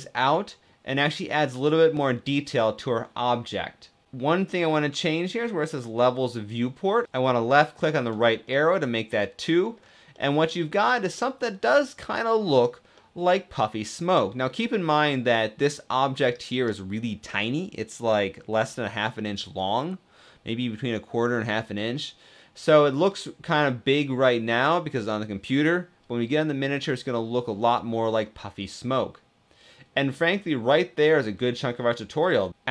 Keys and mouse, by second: 6.8 click, 8.2-9.3 middle drag, 9.8 middle click, 11.0-12.3 middle drag, 12.7-16.4 middle drag, 21.4-22.6 middle drag, 26.7-27.7 middle drag, 28.3-29.6 middle drag, 30.3-32.5 middle drag.